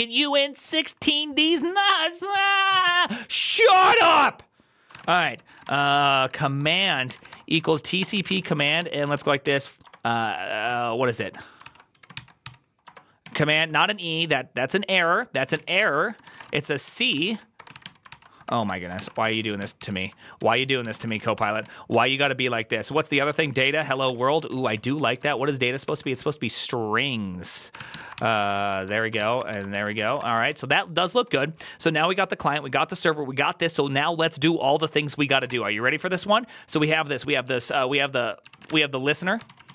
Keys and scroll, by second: 2.5-3.2 typing, 4.7-13.8 typing, 10.5 ctrl+c, 13.1 Tab, 13.4 ctrl+c, 15.1-22.0 typing, 20.2 ctrl+p, 20.4 ctrl+p, 20.7 ctrl+y, 20.9 ctrl+c, 21.0 ctrl+c, 22.1 Return, 23.0 Tab, 23.2 ctrl+c, 23.4 ctrl+c, 23.5-31.7 typing, 38.5-39.7 typing.